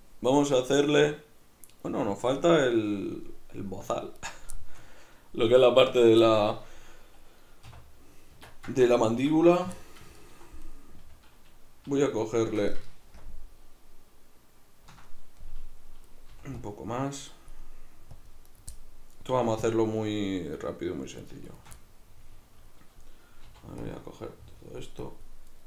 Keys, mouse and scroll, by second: 4.2 right click, 4.6-10.6 shift+middle drag, 7.7 \, 8.4 Tab, 9.6 3, 10.6 right click, 12.0 shift+right click, 12.2 shift+right click, 12.4 shift+right click, 13.2 ctrl+KP_Add, 15.4-18.6 middle drag, 16.3 c, 18.6 right click, 18.8-21.3 middle drag, 19.3 c, 21.5 shift+right click, 21.7-25.5 middle drag, 23.5 c, 25.5 right click.